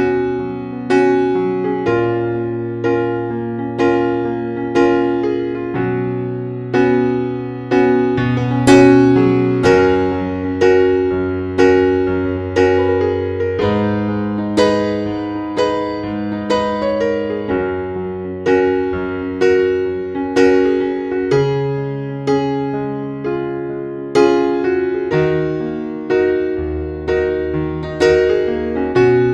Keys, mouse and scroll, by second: 13.2 click, 16.4 KP_1, 22.4 click, 24.0 scroll down 1, 24.6-28.1 scroll up 1, 28.1 click, 28.9-29.3 typing.